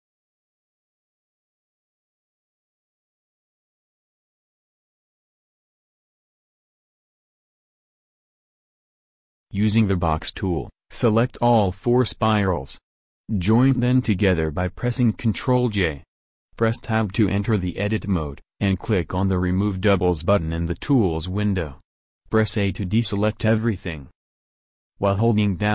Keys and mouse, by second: 5.0-10.0 drag, 10.0 b, 13.5 ctrl+j, 14.8 Tab, 22.6 a.